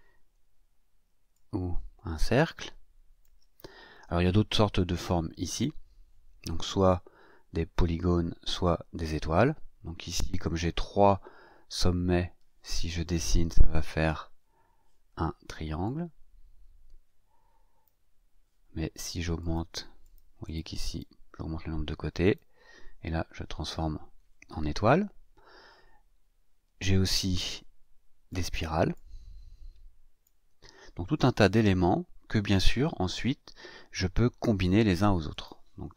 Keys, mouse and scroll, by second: 1.3-3.4 ctrl+shift+drag, 5.4 click, 15.8-18.0 drag, 19.3 click, 20.0 click, 20.4 click, 20.8 click, 22.2 click, 28.3 click, 28.9-30.4 drag, 35.3 click.